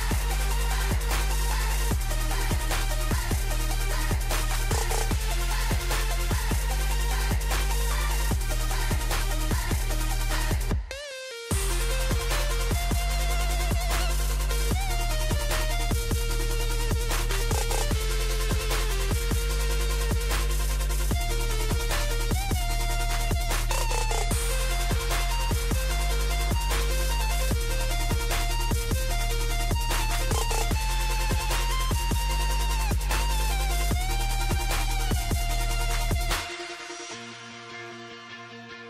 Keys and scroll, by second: 0.4 super+z, 5.6 alt+shift+Down, 9.3 alt+shift+Down, 15.8 super+d, 16.0 super+r, 20.5 super+a, 23.5 Escape, 27.8 super+d, 32.0 Escape, 37.5 super+s, 38.1 super+-.